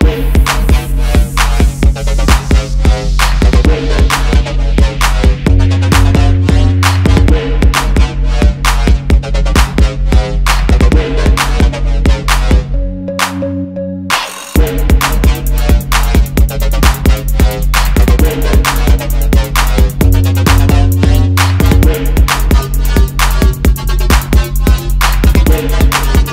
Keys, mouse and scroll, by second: 1.9 alt+scroll up 1, 2.5 alt+scroll down 1, 4.6 alt+scroll up 1, 5.6-6.0 alt+scroll down 1, 6.1 space, 6.4 alt+scroll up 1, 6.9 shift+click, 7.5 shift+click, 7.5 alt+scroll down 2, 7.8 shift+click, 9.2 double click, 9.5 alt+scroll down 1, 10.0 space, 11.5 alt+scroll up 1, 11.8 space, 12.1 alt+scroll down 1, 13.2 alt+scroll up 1, 13.6 alt+shift+click, 14.4 alt+scroll up 1, 14.8 alt+scroll down 1, 15.8 alt+scroll down 1, 17.9 alt+scroll up 1, 18.3 right click, 19.0 double click, 19.8 shift+click, 20.9 double click, 21.1 alt+scroll up 1, 22.1 alt+shift+click, 22.7 alt+scroll up 1, 24.4-24.7 alt+scroll down 1, 24.7 alt+scroll up 1.